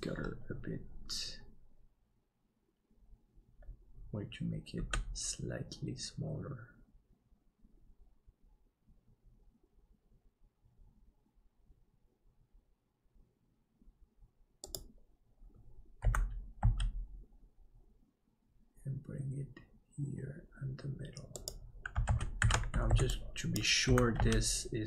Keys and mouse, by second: 4.8 s, 16.0 g, 22.1 alt+z, 22.4 alt+a, 22.8 b, 23.8 g.